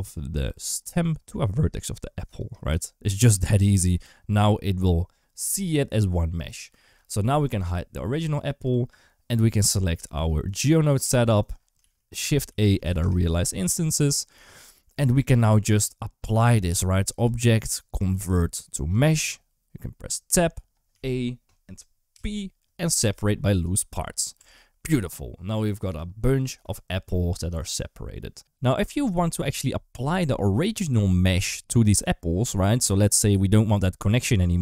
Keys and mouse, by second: 2.5 f, 3.0 Tab, 3.5 alt+z, 9.1 click, 11.6 shift+a, 17.0-18.9 drag, 20.2 Tab, 20.8 a, 21.9 p, 24.2 Tab.